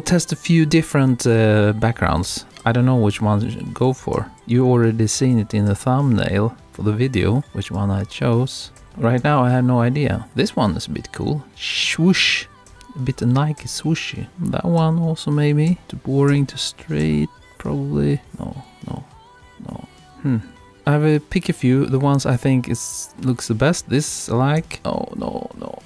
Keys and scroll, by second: 2.3 Right, 5.3 Left, 7.4 Left, 12.7 Right, 24.8 Left.